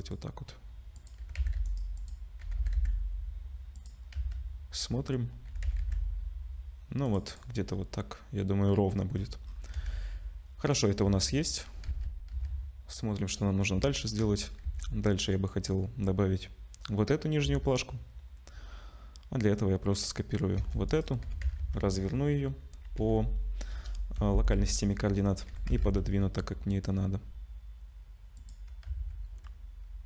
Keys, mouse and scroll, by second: 1.0 click, 1.2 g, 2.0 click, 2.4 g, 4.0 scroll down 2, 4.2 z, 4.9 scroll up 1, 5.5 g, 7.3 click, 7.6-8.0 scroll down 4, 9.2-9.8 scroll down 11, 9.8 ctrl+s, 11.0 z, 11.9 z, 13.9 shift+middle click, 14.3 scroll up 2, 15.3 ctrl+s, 15.3 scroll up 1, 17.2 scroll down 2, 17.4 z, 20.8 shift+d, 21.2 r, 24.6 z, 25.2 scroll up 1, 25.5 g, 28.9 z.